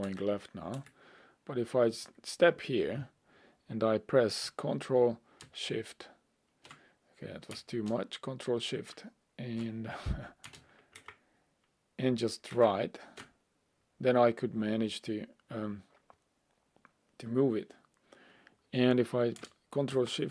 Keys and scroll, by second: 0.1 Left, 0.8 Left, 11.0 ctrl+shift+Right, 12.5 ctrl+Right, 20.0 ctrl+shift+Left.